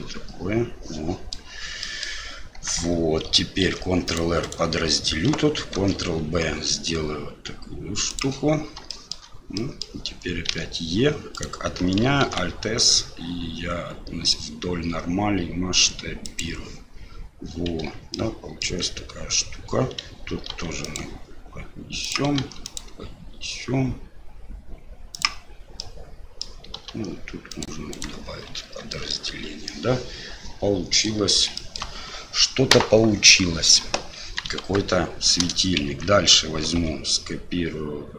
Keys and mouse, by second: 1.0 click, 1.1 middle click, 1.8 middle drag, 3.2 ctrl+Tab, 3.6 ctrl+r, 5.8 ctrl+b, 9.0 shift+click, 9.6 click, 12.2 alt+s, 17.8 Tab, 18.2-18.6 drag, 18.7 Tab, 20.5 ctrl+r, 25.9 click, 26.9 ctrl+r, 28.6 Tab, 28.9 drag, 29.7 drag, 29.9-31.1 middle drag, 31.5 shift+drag, 34.2 KP_1, 34.6 KP_3, 35.9 Tab, 36.8 a.